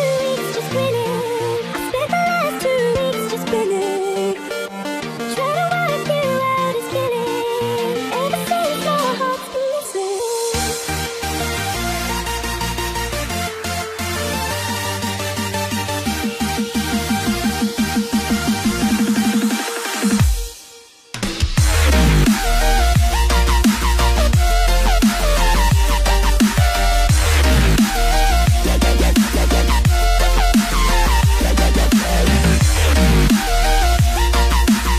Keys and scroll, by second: 2.0 super+z, 3.2 ], 13.6 space.